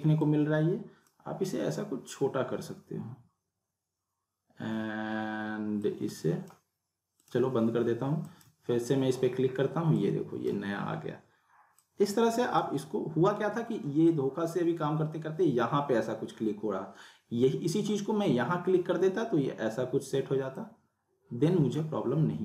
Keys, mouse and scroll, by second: 0.2-1.2 drag, 5.8-6.8 drag, 20.5-21.8 drag.